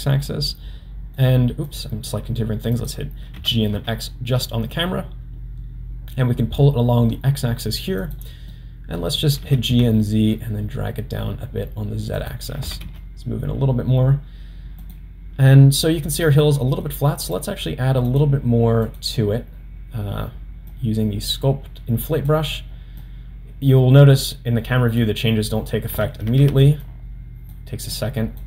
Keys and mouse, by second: 1.7 drag, 2.7 click, 3.3 g, 8.6-9.0 middle drag, 9.4 g, 12.6 g, 16.4-16.9 middle drag, 17.3 drag, 18.1-19.0 drag, 20.7-22.3 drag, 23.0-25.0 drag, 26.3 ctrl+z, 26.8 click, 27.9 click.